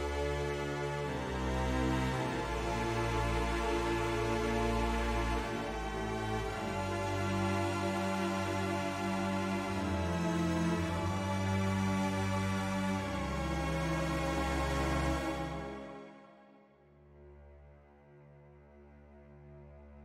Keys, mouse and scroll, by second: 0.4 ctrl+r, 4.2 click, 5.9 ctrl+r, 9.0 click, 11.6 ctrl+r, 15.7 click.